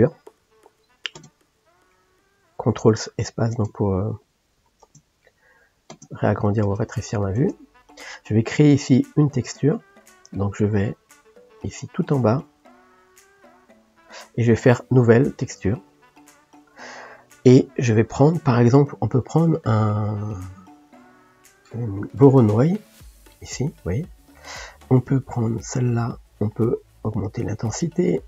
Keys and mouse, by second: 1.2 ctrl+space, 3.5 ctrl+click, 4.9 ctrl+space, 5.9 ctrl+space, 6.7 ctrl+space, 7.4 ctrl+space, 15.8-24.7 drag, 27.1-28.2 drag.